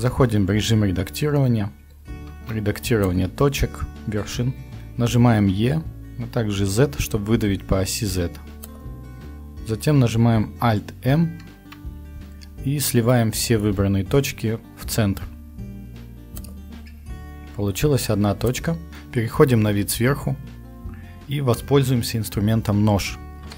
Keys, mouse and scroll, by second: 0.4 Tab, 2.3 ctrl+Tab, 5.4 e, 11.5 alt+m, 18.6 click, 18.9 t, 20.1 KP_7, 23.5 t.